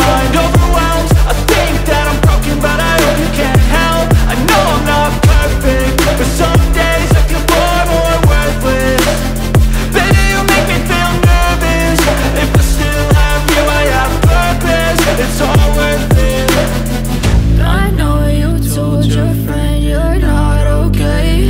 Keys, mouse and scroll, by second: 0.3 click, 3.3 Up, 5.9-6.7 scroll down 1, 9.1 click.